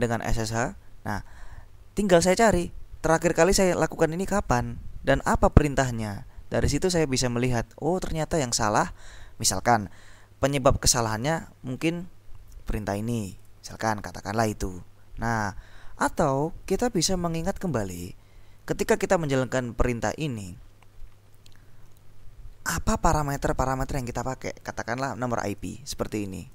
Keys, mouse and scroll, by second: 1.3-1.9 scroll down 2, 3.0-4.4 scroll down 4, 6.7-7.3 scroll down 2, 11.9-12.5 scroll down 2, 13.3-14.5 drag, 17.5 click, 25.5 click.